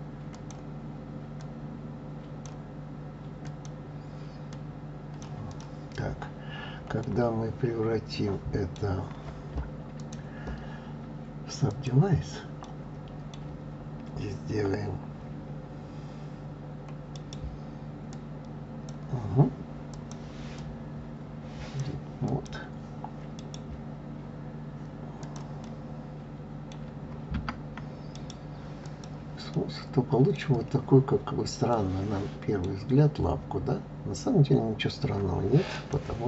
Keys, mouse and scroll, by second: 0.3 click, 1.4 click, 3.4 click, 4.5 click, 5.5 click, 6.1-6.6 scroll down 2, 6.6-7.0 scroll up 1, 7.0-9.9 middle drag, 9.9-12.6 drag, 12.6-15.7 middle drag, 17.1-19.9 right drag, 19.9-22.4 drag, 23.4-25.2 right drag, 25.2 click, 25.6-27.4 middle drag, 27.4 Tab, 28.1-29.5 right drag, 29.5-30.6 middle drag, 30.6-31.7 scroll down 3, 31.7-32.9 middle drag, 32.9-34.3 scroll up 1, 34.3-34.8 scroll up 1, 34.8-35.7 scroll down 2, 35.7 click.